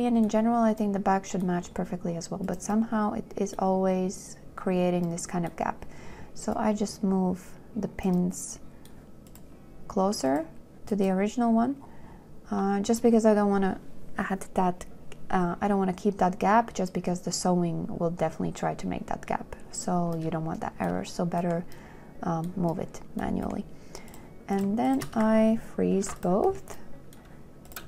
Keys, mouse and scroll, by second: 1.0 q, 24.9 shift+click, 25.2 shift+click, 26.2 ctrl+k.